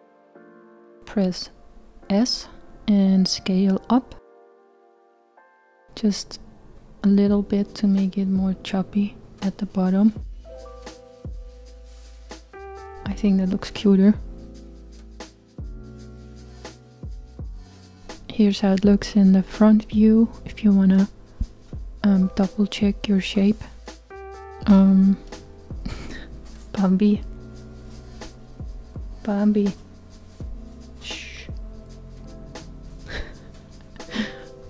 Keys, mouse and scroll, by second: 1.0 s, 23.0 KP_1, 25.9-28.0 scroll down 1, 32.3-34.4 middle drag, 34.4 click.